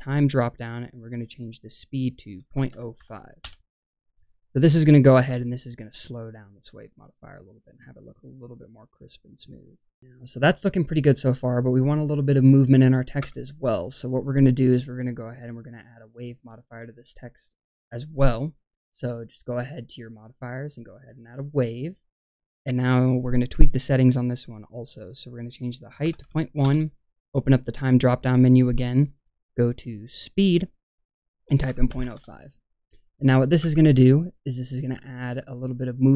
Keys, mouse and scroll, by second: 1.5-3.4 drag, 4.6 click, 5.1 space, 10.7-11.3 scroll up 1, 13.1 space, 13.8 click, 17.8-20.8 drag, 24.9-26.6 drag, 28.2 click, 28.9-29.7 right drag, 29.7 click, 30.1-32.2 drag, 33.6 space.